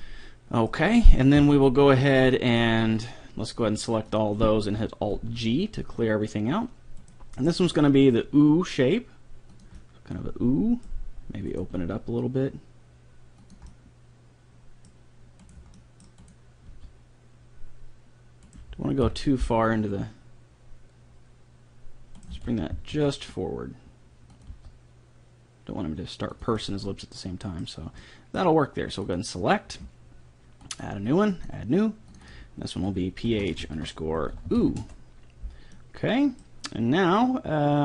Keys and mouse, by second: 0.0 middle click, 1.4 KP_3, 2.5 middle click, 2.8-4.3 right drag, 4.1-5.9 drag, 5.2 alt+g, 7.0 right click, 7.5 middle click, 7.7 g, 9.8-11.5 middle drag, 11.5-13.3 right drag, 11.7 g, 13.7-15.5 middle drag, 15.5 right click, 15.7 middle click, 16.7 g, 17.5 right click, 19.1 KP_3, 19.5 g, 22.4 g, 24.5 g, 26.5 middle click, 27.7 middle click, 27.9 middle click, 28.1 middle click, 29.1-32.5 drag, 32.7-34.1 drag, 34.5 o, 35.7 middle click, 37.2-37.8 drag.